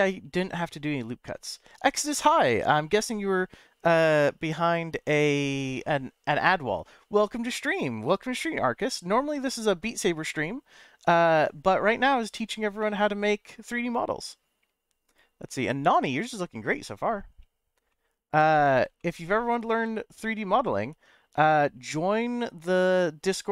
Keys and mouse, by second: 12.8-13.9 middle drag, 17.9 middle click, 19.0 shift+middle click.